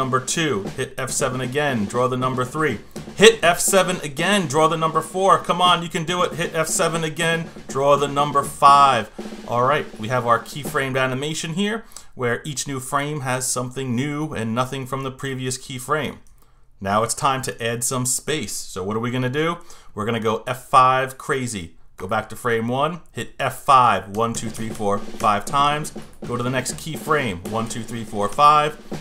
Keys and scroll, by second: 0.8 F7, 3.4 F7, 6.5 F7, 24.1 F5, 27.4 F5.